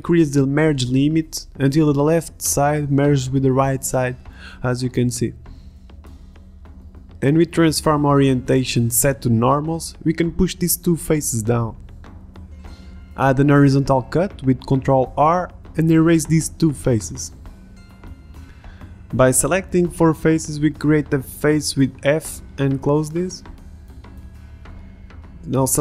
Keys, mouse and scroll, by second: 1.0-2.4 middle drag, 2.4 click, 3.2 middle click, 6.4 middle click, 6.7 click, 11.9-14.1 drag, 13.8 middle click, 14.6 ctrl+r, 16.4 g, 16.5 ctrl+Tab, 18.0 a, 18.2 b, 20.1 Delete, 21.9 Tab, 23.1 f, 23.3 a, 23.9 f, 23.9 a, 24.2 Tab, 25.3 Tab.